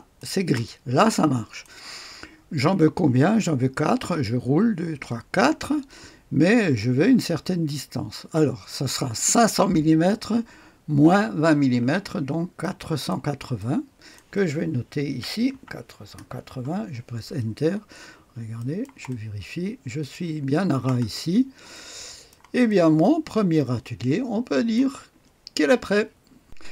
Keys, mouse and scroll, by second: 0.6-1.6 drag, 2.2 click, 4.1-4.9 scroll up 1, 4.9-5.5 scroll up 1, 5.5-12.5 scroll up 1, 12.5-14.6 drag, 15.0 KP_4, 15.4 KP_8, 16.1 KP_0, 16.5 Return, 17.9-18.8 scroll up 1, 18.5 right click, 19.0-20.5 drag, 19.4 right click, 19.5 right click, 21.0-21.6 scroll down 1, 21.6-25.1 drag, 26.4 click.